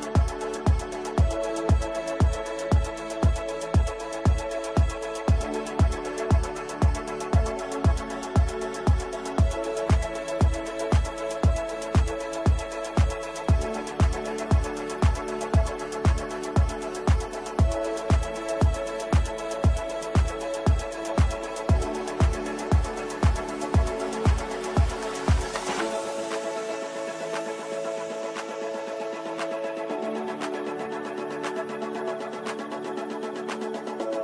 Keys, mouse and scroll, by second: 3.4 ctrl+u, 3.9 shift+click, 6.0 alt+click, 6.8 ctrl+g, 6.9 F3, 8.0 click, 10.0 click, 10.8-13.7 alt+drag, 13.7 right click, 14.4 F2, 14.5-17.2 drag, 18.0-19.7 alt+drag, 19.7-24.8 alt+drag, 27.1-33.8 drag.